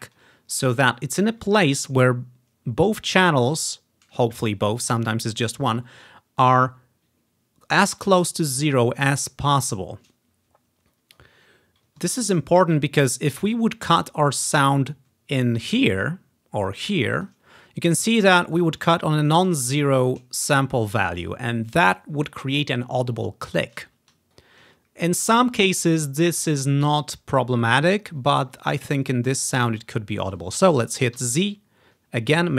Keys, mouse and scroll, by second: 0.5-2.0 scroll up 1, 13.1 scroll down 2, 14.1-17.3 drag, 17.6 ctrl+scroll up 2, 17.8-18.9 ctrl+drag, 28.8 ctrl+scroll down 2, 30.2-30.6 scroll down 1, 30.6 ctrl+scroll up 2, 31.2 z.